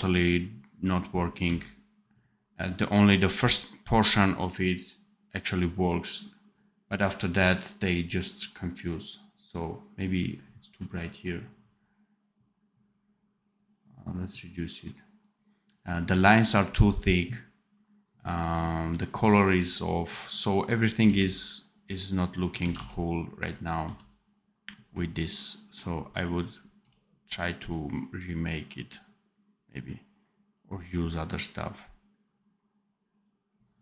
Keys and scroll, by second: 1.4 d, 20.9 x, 22.6 ctrl+z, 23.7 v.